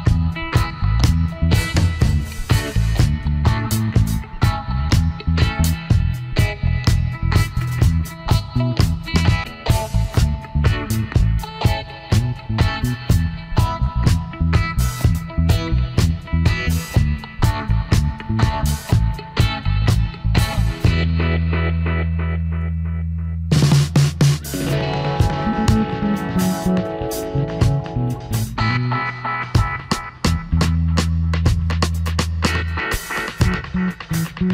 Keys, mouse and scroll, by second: 0.2 e, 3.6 alt+shift+click, 22.0 shift+click, 23.5 alt+shift+click, 25.0 space, 28.7 space, 31.5 space.